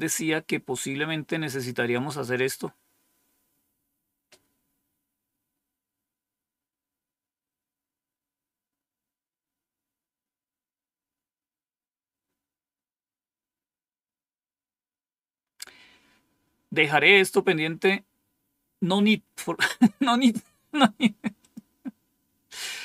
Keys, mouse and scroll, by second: 2.0-2.7 scroll down 2, 21.3 click.